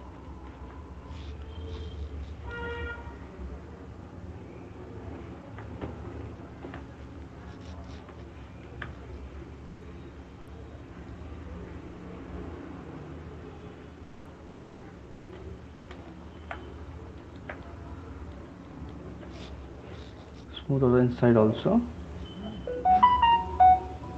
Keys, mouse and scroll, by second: 0.1 click, 0.6 alt+click, 1.7 ], 1.9 ], 2.1 ], 2.3 ], 3.1 alt+click, 3.3 alt+right click, 4.5 alt+right click, 5.0 shift+right click, 5.7 alt+right click, 6.8 right click, 7.4 [, 7.6 shift+click, 8.0 [, 8.2 [, 10.5 shift+click, 11.6 click, 12.9 shift+click, 13.9 shift+click, 15.2 shift+click, 16.6 right click, 17.5 alt+click, 18.5 click, 19.0 alt+click, 22.9 shift+click, 23.9 alt+click.